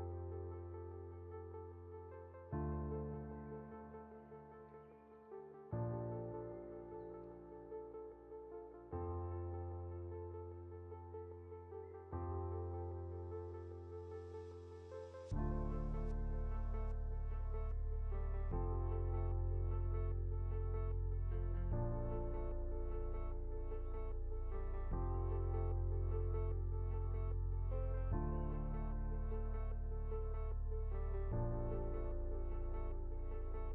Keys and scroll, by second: 0.6 ctrl+z, 5.8 Left, 10.1 ctrl+0, 12.9 ctrl+z, 19.5 ctrl+shift+z, 21.1 ctrl+z, 22.9 ctrl+-, 25.6 ctrl+alt+2, 27.7 ctrl+g.